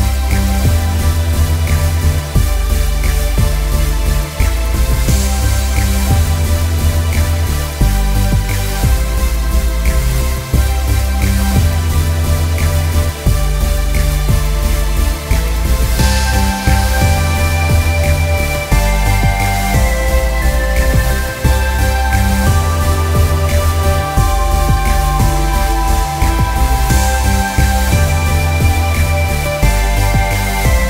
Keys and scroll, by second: 0.0 Delete, 5.5 space, 6.4 ctrl+space, 6.6 KP_Subtract, 25.6 ctrl+KP_Add, 25.6 ctrl+KP_Add, 25.8 ctrl+KP_Add, 25.9 ctrl+KP_Add, 26.1 ctrl+KP_Add, 26.6 t.